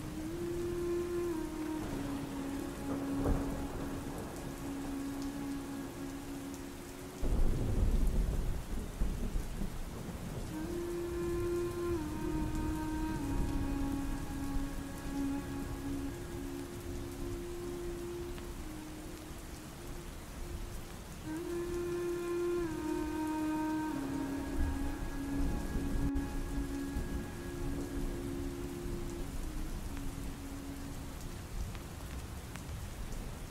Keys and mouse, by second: 0.6 a, 1.0 x, 1.4 ctrl+v, 2.4 click, 2.9 click, 2.9 middle click, 4.6-5.6 right drag, 6.1 click, 6.1 middle click, 8.0 click, 9.9 click, 9.9 right click, 11.6 click, 12.4 click, 13.7 click, 13.7 right click, 14.8 ctrl+s, 14.9 click, 15.6 right click, 15.8 m, 16.9 right click, 17.5 right click, 17.6 m, 17.7 click, 18.3-19.1 right drag, 19.7 middle click, 20.1 ctrl+shift+click, 20.6 middle click, 21.4-22.3 drag, 22.7 click, 23.5-24.7 drag, 25.1-27.0 drag, 27.6 middle click, 29.6 middle click, 30.5 click, 31.1 middle click, 31.9 ctrl+s, 32.9 middle click.